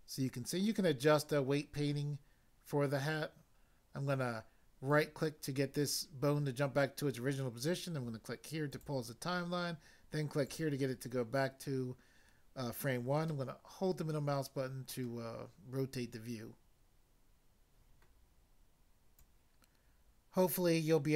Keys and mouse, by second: 4.9 right click, 8.7 click, 10.4 click, 13.2 middle click, 19.2 click.